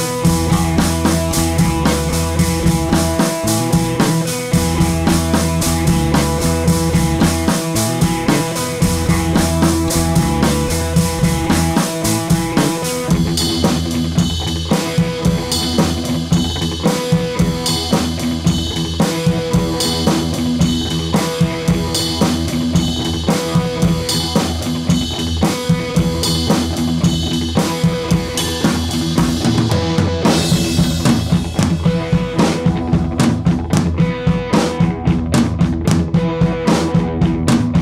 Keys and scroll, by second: 26.0 Right, 26.1 Right, 35.8 d.